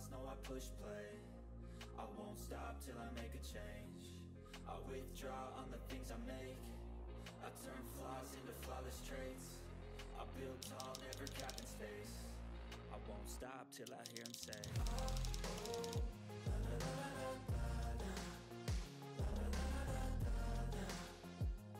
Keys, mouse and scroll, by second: 1.0 click, 1.8-8.7 drag, 10.5 ctrl+z, 11.7 click, 12.4 click, 13.9 ctrl+z, 15.3 ctrl+click, 15.5 ctrl+z, 16.3 click, 17.8 click, 19.5-20.7 drag, 20.9 click.